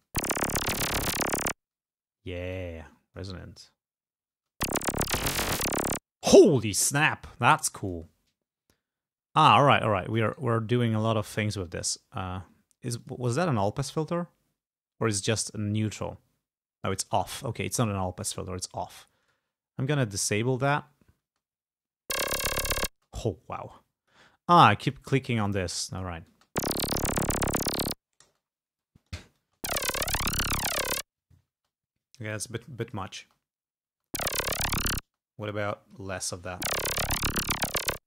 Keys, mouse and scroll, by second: 1.7 space, 2.6 click, 3.5 space, 4.4 space, 6.2 space, 7.9 click, 10.3 right click, 13.1 click, 15.3 right click, 17.9 click, 19.3 right click, 20.7 click, 21.3 space, 22.0 space, 23.0 space, 23.3-24.4 drag, 25.0 click, 25.5 click, 26.4 space, 28.4 space, 28.9 click, 29.5 space, 31.6 space, 32.4 click, 33.3 space, 34.0 space, 35.1 space, 35.6 click, 36.4 space.